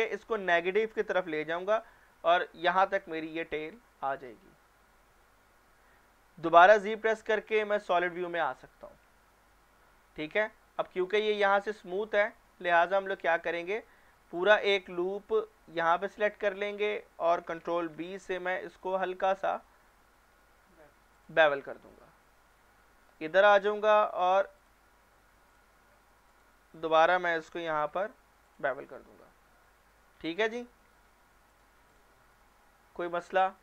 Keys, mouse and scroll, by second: 1.5 click, 6.9 z, 7.8 click, 9.8-10.4 middle click, 10.8-11.9 scroll down 1, 12.1 shift+middle click, 12.5 scroll up 1, 13.3 shift+middle click, 13.7-14.4 scroll up 1, 14.4 click, 15.8 alt+click, 17.9 ctrl+alt+b, 19.5-20.3 alt+scroll up 1, 20.3-21.1 alt+scroll down 1, 21.1 alt+click, 22.0 alt+shift+middle click, 22.5 alt+scroll up 1, 23.6 click, 24.6 click, 25.5 click, 26.3 alt+click, 27.4 ctrl+b, 28.5 click, 28.8 scroll down 1, 29.2 Tab, 30.2-30.6 scroll down 1, 30.6 middle click, 31.5 click.